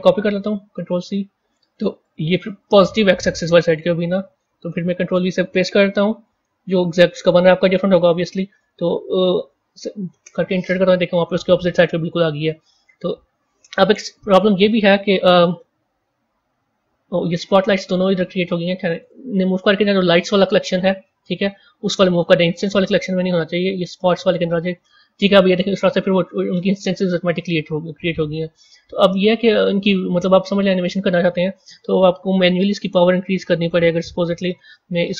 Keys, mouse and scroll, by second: 1.9 click, 2.5 click, 4.2-7.2 drag, 14.2-16.4 middle drag, 16.4 scroll down 3, 17.5 click, 18.9 shift+click, 23.2 drag, 26.0 a, 26.2-27.5 middle drag, 27.5 z, 28.8-30.6 middle drag, 30.6 click, 33.6 click, 34.8 click.